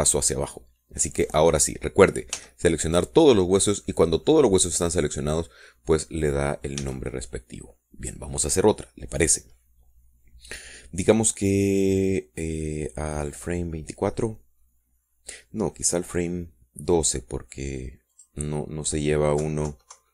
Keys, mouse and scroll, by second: 2.5 scroll up 1, 2.9 scroll down 1, 3.6 a, 7.5 click, 8.1 a, 8.4-9.5 drag, 14.6 click, 19.4 click.